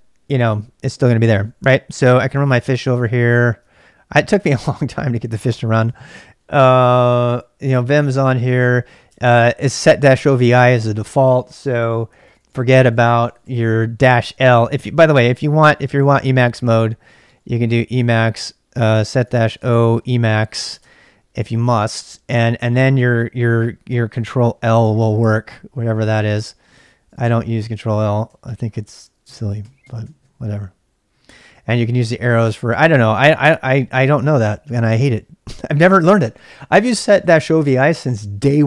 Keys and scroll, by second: 1.2-3.1 typing, 5.2-5.9 typing, 7.0-13.9 typing, 15.1 ctrl+c, 15.1-21.1 typing, 23.1 Up, 23.3 Up, 23.4-27.1 typing, 28.4 ctrl+l, 29.2 Up, 29.6 Up, 29.9 Up, 30.0 Down, 30.1 Down, 30.9 Down, 31.1 Down, 31.4 Down, 31.5 Up, 31.6 Up, 31.8 Up, 32.0 Down, 32.3 Up, 32.4 Up, 32.8 Up, 35.1-37.6 typing.